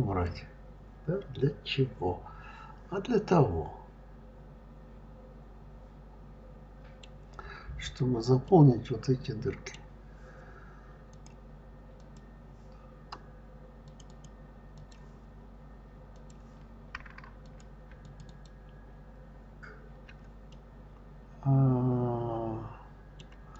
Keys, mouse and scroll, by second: 0.1-3.1 middle drag, 7.6-8.3 scroll up 2, 8.3-10.9 middle drag, 10.9-13.8 drag, 13.9 click, 14.6 click, 14.6-15.9 right drag, 15.9 click, 17.3 click, 17.9 shift+click, 18.1 shift+click, 20.3-23.3 middle drag, 23.4 click.